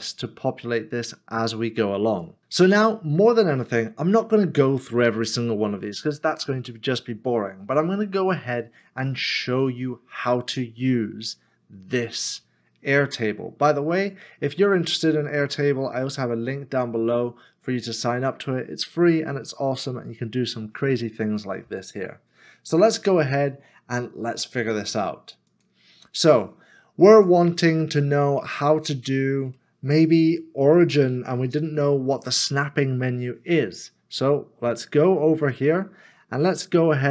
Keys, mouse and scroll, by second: 28.2 space, 28.4 shift+middle click, 29.8 middle click, 33.6 middle click.